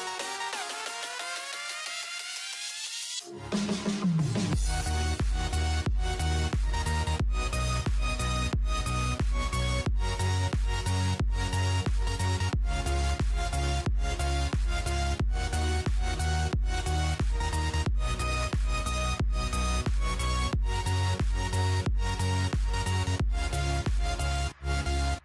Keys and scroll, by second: 0.8 y, 7.9-11.3 typing, 12.5-13.5 typing, 16.6-18.5 typing, 20.1-21.0 typing, 22.5-23.4 typing.